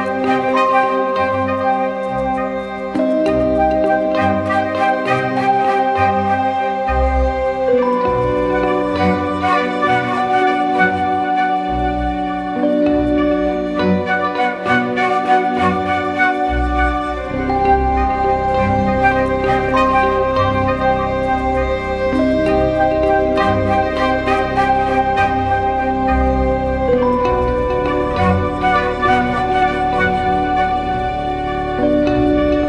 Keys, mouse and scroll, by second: 2.4-4.7 scroll up 1, 6.8 alt+right click, 7.6-10.3 scroll down 1, 12.9 alt+click, 15.8-17.4 typing, 22.6 typing, 24.2 double click, 29.1 alt+click.